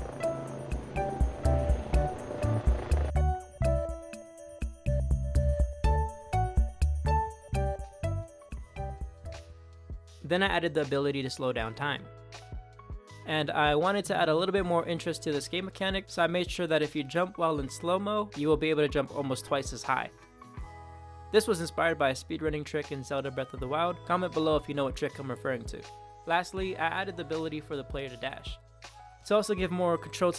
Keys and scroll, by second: 2.0-9.0 typing, 10.3-12.1 typing, 13.7 d, 17.6 Left, 18.2 space, 19.7 Up, 21.2 Down, 22.5 Up, 22.8 Left, 23.1 Right, 23.7 Up, 24.0 Left, 24.5 Right, 25.3 Up, 25.6 Left, 26.7 space, 28.2 Up, 29.6 Down, 30.0 space.